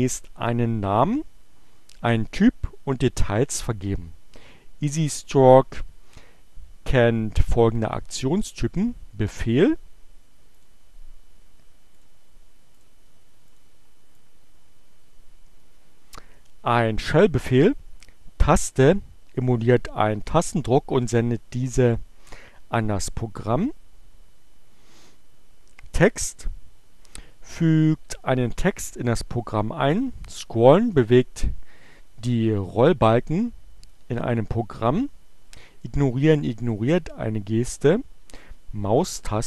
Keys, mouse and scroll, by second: 10.6 click, 11.9 click, 12.3 click, 13.5-39.4 drag.